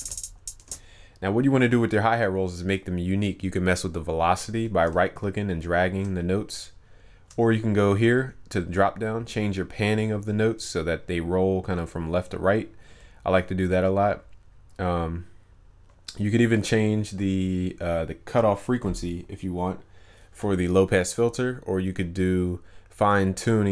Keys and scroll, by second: 0.0 ctrl+u.